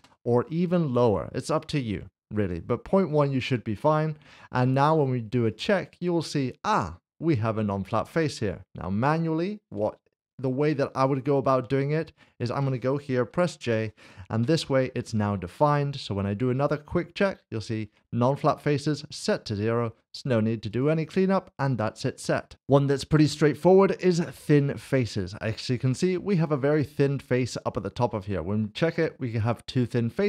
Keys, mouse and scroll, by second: 3.3 click, 9.7 Tab, 11.0 Tab, 12.1 shift+click, 14.4 Tab, 15.5 click, 20.7 click, 22.5 double click, 23.5 click, 25.6 middle click.